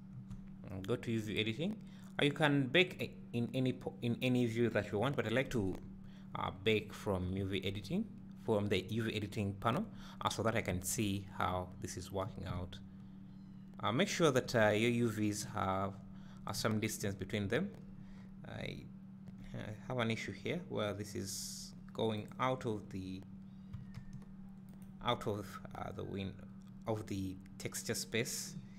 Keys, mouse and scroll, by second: 1.6 click, 6.5-7.1 scroll down 1, 22.3 click, 23.9 g, 25.1 right click.